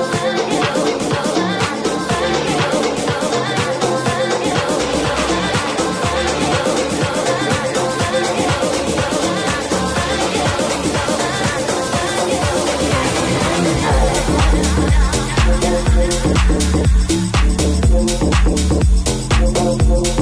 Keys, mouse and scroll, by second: 0.6 Tab, 2.6 alt+z, 3.5 alt+z, 3.9 Tab, 10.7 Tab, 11.6 alt+right click, 12.9 alt+z, 13.5 c, 14.5 alt+z, 16.9 g, 18.2 right click, 18.3-20.2 middle drag.